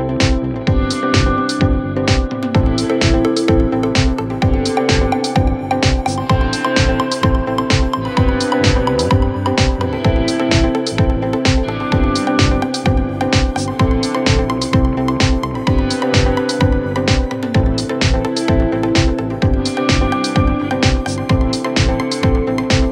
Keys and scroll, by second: 2.1 KP_Add.